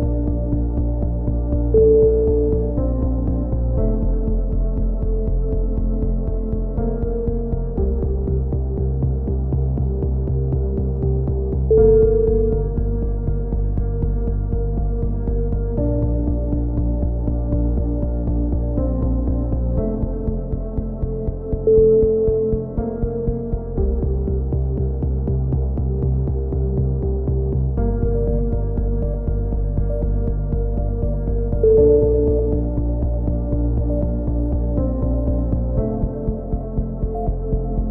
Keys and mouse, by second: 0.8-1.9 drag, 1.9 a, 1.9-2.9 middle drag, 3.3 k, 8.0-9.8 typing, 13.9 KP_1, 14.1 z, 15.0-15.6 drag, 17.2 drag, 17.2 a, 17.5 z, 17.6-18.2 drag, 18.2 KP_3, 18.3 z, 19.2 click, 19.8 z, 20.0 z, 20.6 z, 22.1 z, 22.2 a, 22.8 z, 23.7 z, 24.9 a, 25.2 z, 25.6-26.2 drag, 26.8 KP_3, 27.0 z, 27.4 z, 27.8 Tab, 28.0-28.5 drag, 28.6 KP_1, 28.9 drag, 32.1 Tab, 34.4-34.8 right drag, 34.5 drag, 34.8 middle click, 35.2 middle click, 35.5 shift+d, 36.6 e, 37.2 click.